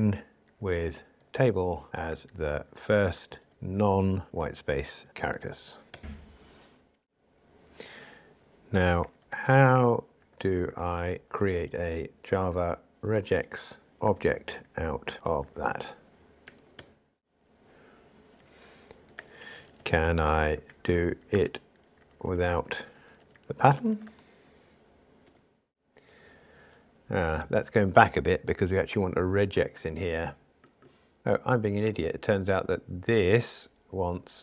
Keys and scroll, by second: 25.7 super+1.